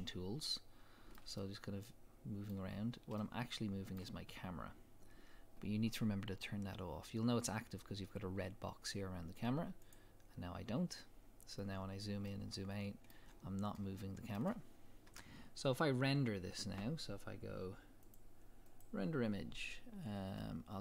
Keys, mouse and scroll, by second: 0.0-9.8 shift+middle drag, 2.8-3.2 scroll up 1, 9.8 click, 11.4 scroll up 1, 11.8 scroll down 1, 12.3-18.1 middle drag, 13.3-13.8 scroll down 1, 15.1 KP_0, 15.6-15.9 scroll up 1, 16.7-18.0 scroll up 1, 18.0 scroll up 1, 18.1-20.8 drag.